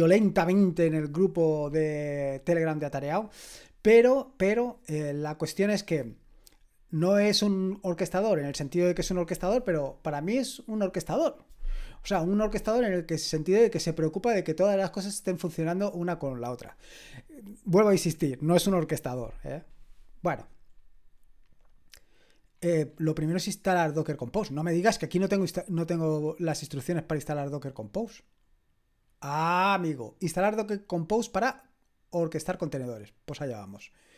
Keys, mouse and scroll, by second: 19.8-20.8 scroll down 1, 20.8-22.6 scroll down 1, 22.6-24.0 scroll down 1, 24.0-27.4 scroll down 1, 27.4-27.9 scroll down 1, 27.9-32.0 scroll down 1, 32.0-34.1 scroll down 1.